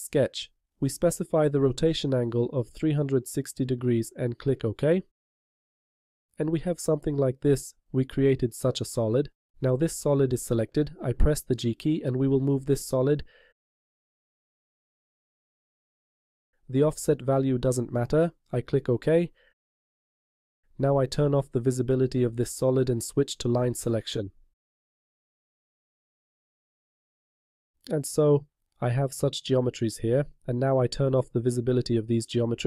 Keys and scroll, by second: 11.5 g.